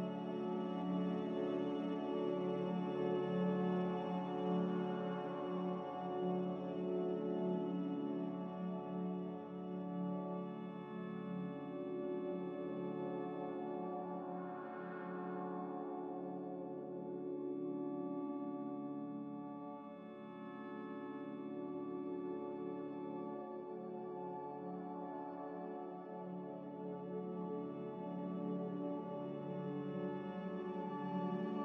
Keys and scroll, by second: 13.8 z, 16.4 F9, 17.9 a.